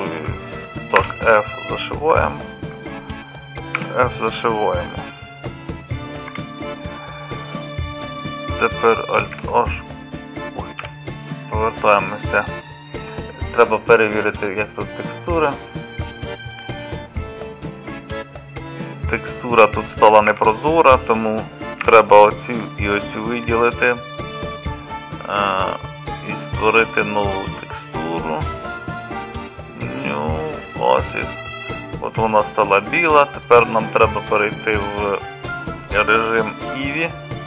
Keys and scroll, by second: 1.0 f, 3.8 f, 6.3 Tab, 9.3 alt+h, 10.8 KP_Divide, 21.8 3.